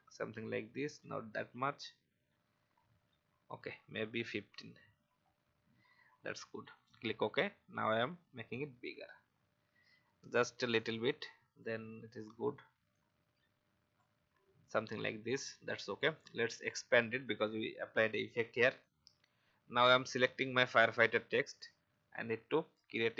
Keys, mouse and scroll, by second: 1.0 shift+scroll down 1, 6.7 click, 9.3 alt+scroll down 1, 10.7 shift+click, 12.9-14.1 drag, 14.8 alt+scroll up 1, 16.3 click, 20.0 alt+scroll up 1, 21.9 click.